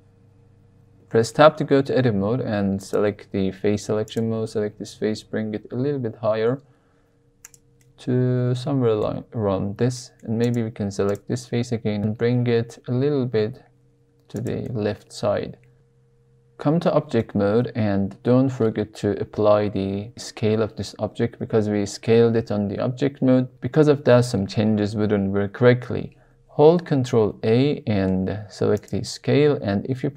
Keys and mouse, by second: 0.9 Tab, 2.7 click, 4.8 g, 5.1 z, 7.4 click, 7.8-9.0 middle drag, 9.9 middle click, 10.4 drag, 11.9 g, 12.1 g, 12.3 x, 12.9 x, 14.3 click, 14.6-15.1 middle drag, 15.5 middle click, 17.1 Tab, 27.1 ctrl+a.